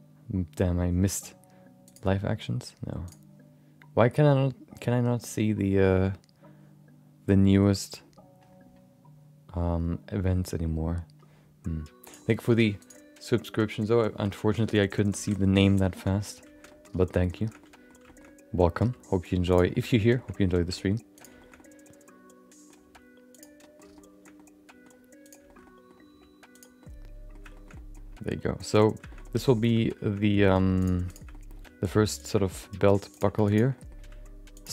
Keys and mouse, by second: 15.9 shift+middle click, 16.1 middle click, 16.7 middle click, 17.0 shift+middle click, 17.2 middle click, 17.4 shift+middle click, 17.6 middle click, 18.0 shift+middle click, 18.8 g, 19.7 middle click, 20.1 shift+middle click, 20.3 middle click, 20.6 middle click, 20.7 middle click, 21.1 click, 21.3 shift+middle click, 21.5-22.7 middle drag, 22.8 g, 23.6 middle click, 23.9 shift+middle click, 24.3 middle click, 25.2 click, 25.4 middle click, 25.6 middle click, 26.0 g, 26.8 middle click, 27.5 shift+middle click, 27.7 middle click, 28.5 middle click, 29.1 middle click, 29.2 middle click, 29.5 middle click, 29.7 middle click, 30.0 middle click, 30.2 middle click, 30.8 click, 31.1 shift+click, 31.3 middle click, 31.5 g, 32.4 middle click, 32.6 middle click, 33.1 click, 33.4 click, 33.7 middle click, 34.0 g.